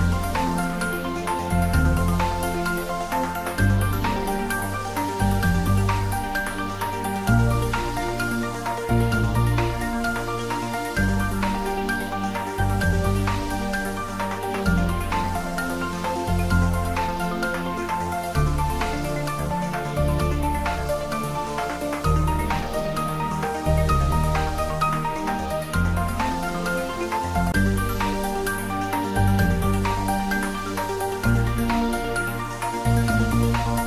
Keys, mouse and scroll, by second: 1.0 click, 3.9 click, 10.5 click, 22.6 scroll down 1, 24.8-28.6 middle drag, 28.6 click, 32.1-32.5 scroll up 1, 32.5-33.5 scroll down 1, 33.5-33.8 scroll.